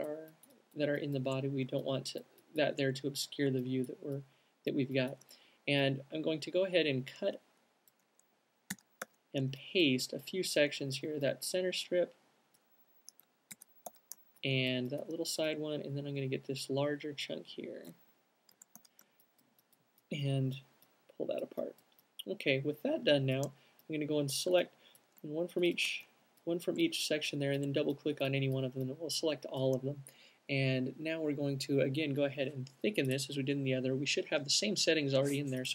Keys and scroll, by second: 9.0 super+x, 9.4 super+v, 11.7 alt+super+v, 13.8 alt+super+x, 14.2 alt+super+v, 18.8 super+x, 19.0 super+v, 35.3 q.